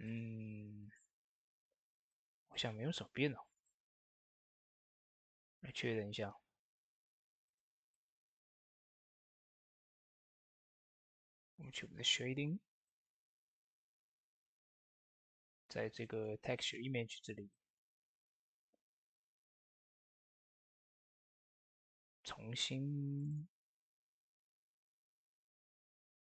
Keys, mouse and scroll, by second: 3.4 scroll down 1, 5.7 scroll up 1, 6.6 scroll up 1, 7.3 click, 12.7 middle click, 13.1-13.6 scroll down 1, 13.9 middle click, 14.2-14.6 scroll down 1, 14.6 middle click, 14.9-15.4 scroll up 1, 15.9 middle click, 16.8-17.4 scroll up 1, 17.4 middle click, 19.4 click.